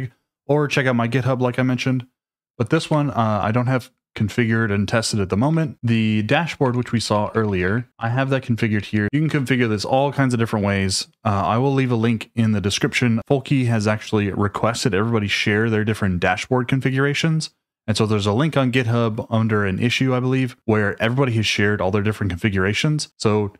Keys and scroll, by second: 2.8 shift+v, 5.5 Escape, 5.7-9.5 typing.